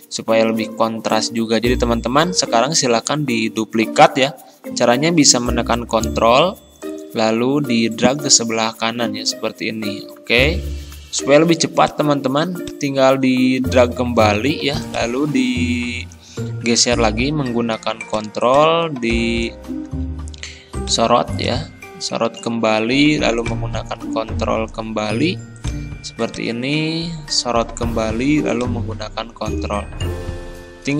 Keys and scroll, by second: 19.9 ctrl+z.